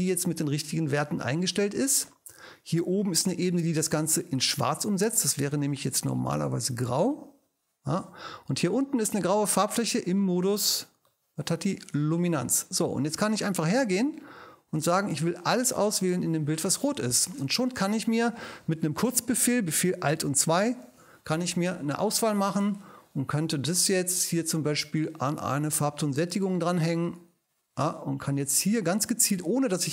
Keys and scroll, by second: 20.4 alt+super+2.